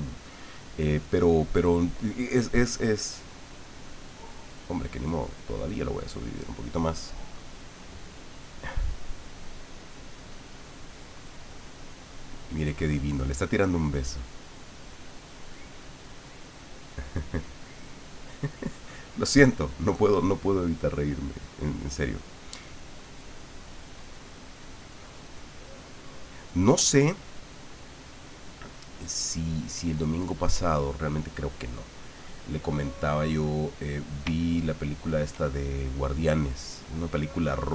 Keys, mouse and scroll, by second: 5.1 click, 7.9-10.6 drag, 10.7-16.1 drag, 18.6-21.2 middle drag, 21.4-23.6 middle drag, 23.6-30.4 drag, 31.1-33.1 middle drag, 33.4 middle click, 34.4 shift+middle click.